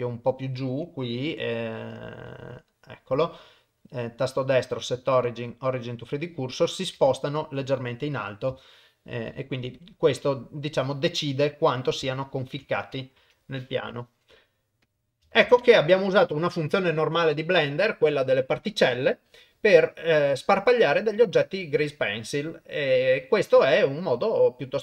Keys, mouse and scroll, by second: 2.5 shift+right click, 3.7-5.4 right drag, 7.0 shift+middle click, 7.8 click, 8.6 shift+middle click, 9.8 click, 11.1 middle click, 12.1 ctrl+middle click, 13.2 KP_0, 14.9 click, 15.5 ctrl+s, 19.1 click.